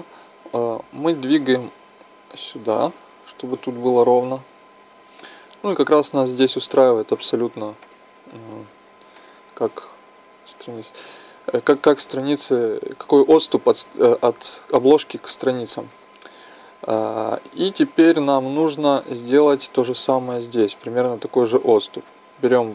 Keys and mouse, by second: 5.2-7.1 middle drag, 7.8 middle click, 8.7 z, 9.4 middle click, 10.2 middle click, 18.2 KP_1, 19.0 z, 20.4 middle click, 21.5 z, 22.2-22.7 drag.